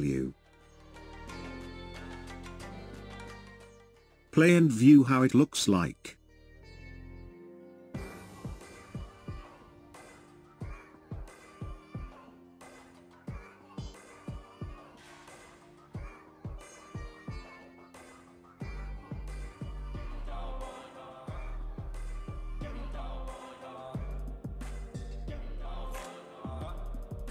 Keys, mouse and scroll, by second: 1.9-4.9 drag, 4.9 space, 7.9 space, 9.2-12.4 drag, 17.5-20.5 drag.